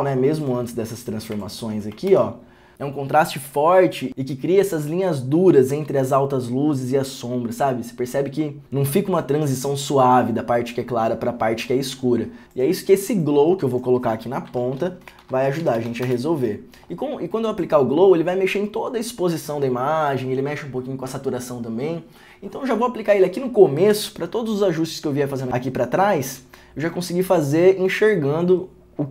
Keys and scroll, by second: 1.4 alt+s, 12.4 ctrl+d, 14.6 Tab, 15.3 g, 16.0 w, 16.1 Return.